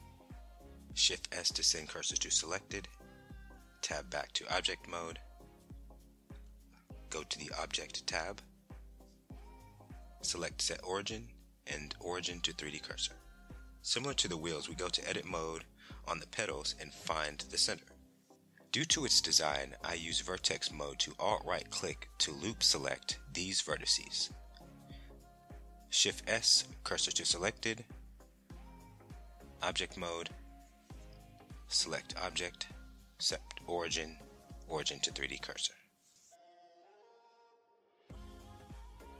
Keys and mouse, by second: 2.5 Tab, 3.9-6.2 drag, 7.4 middle click, 8.7 shift+middle click, 10.6 click, 11.3 shift+middle click, 12.2 middle click, 14.2 z, 18.1 Tab, 19.6 click, 21.2 click, 22.9 alt+click, 24.7 alt+click, 26.3 shift+s, 28.8 Tab, 30.2-32.3 drag, 37.5 KP_1.